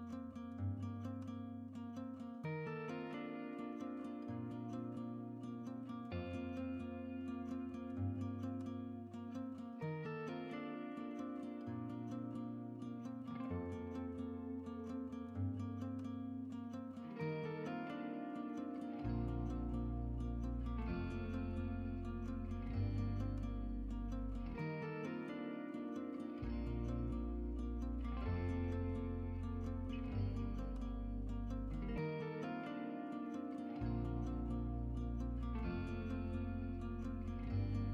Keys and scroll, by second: 31.9-32.9 typing.